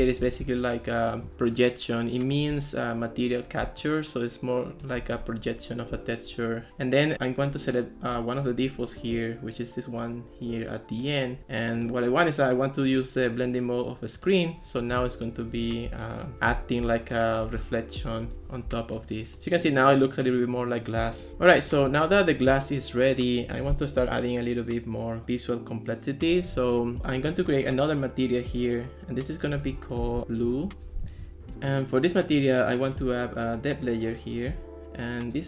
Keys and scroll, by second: 29.9-30.7 typing.